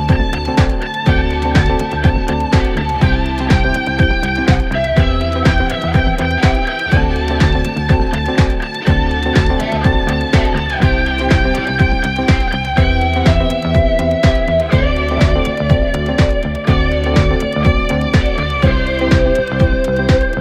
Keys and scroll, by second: 3.7 4, 6.7 ctrl+F1, 8.1 1, 14.3 4, 17.9 4, 19.4 3.